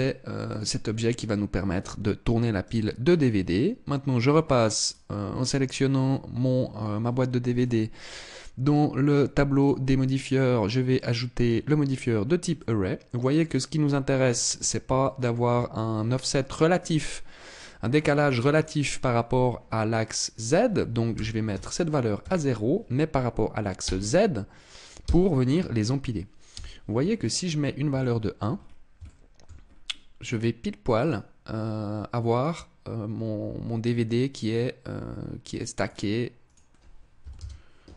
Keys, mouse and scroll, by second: 2.1 right click, 4.3 right click, 7.1 click, 9.0 click, 12.0 middle click, 13.2 scroll up 3, 14.5 shift+middle click, 19.8 click, 26.0 KP_1, 26.8-27.4 scroll down 4, 27.4 shift+middle click, 28.0-28.5 scroll up 5, 28.5 shift+middle click, 29.1 scroll up 2, 30.4 click, 31.9 click, 35.9 click, 37.8 middle click.